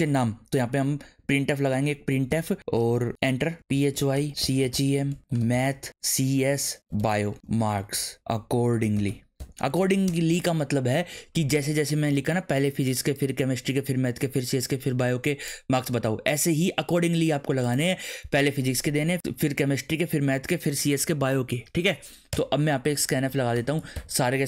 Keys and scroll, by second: 0.8 p, 1.2 r, 1.8 Tab, 2.3-10.2 typing, 22.3 Return, 22.7-24.3 typing.